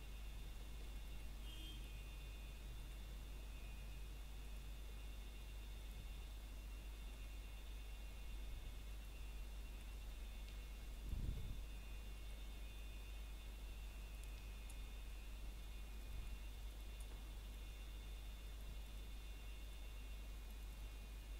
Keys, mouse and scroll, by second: 0.3 e, 2.4 click, 2.7 scroll down 1, 3.0 shift+middle click, 3.3 scroll up 1, 6.1 shift+middle click, 6.8 scroll down 1, 7.3 shift+middle click, 7.6 scroll up 1, 7.9 shift+middle click, 9.4 e, 10.2 click, 10.9 e, 12.7 click, 13.4 s, 16.3 click, 16.6 scroll up 1, 17.4 click, 18.6 ctrl+click, 19.5 s, 20.7 click, 21.0 scroll down 1.